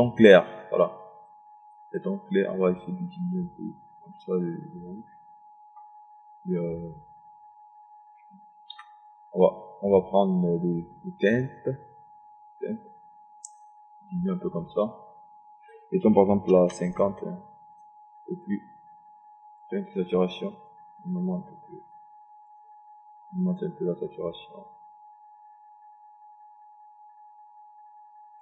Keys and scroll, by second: 9.4 Delete, 17.1 KP_5, 17.4 KP_0.